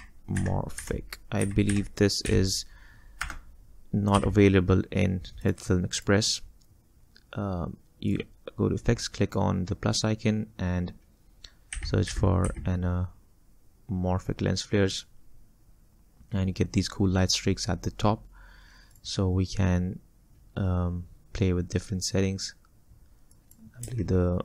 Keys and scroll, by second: 0.0-4.2 typing, 11.6-13.0 typing.